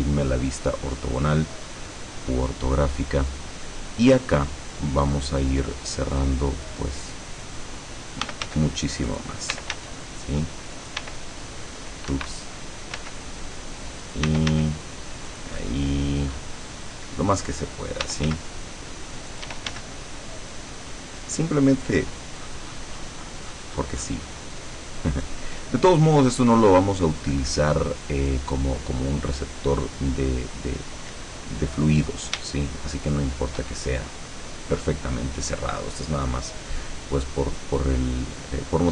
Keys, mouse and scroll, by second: 1.7-2.3 scroll up 2, 8.1-11.1 typing, 9.2 click, 10.9 click, 12.2 Escape, 13.1 s, 14.1 click, 14.3 e, 14.6 s, 15.4 click, 15.8-16.3 scroll up 2, 17.9-19.8 typing, 19.4 click, 21.9 click, 22.5-24.5 scroll down 2, 24.7 middle click, 26.2 middle click, 27.3-28.5 middle drag, 32.6-33.9 shift+middle drag, 38.7 scroll down 2.